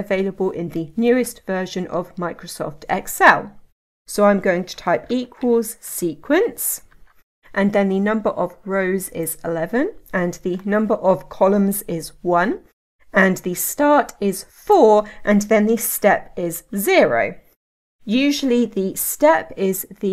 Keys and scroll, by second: 6.8 Tab.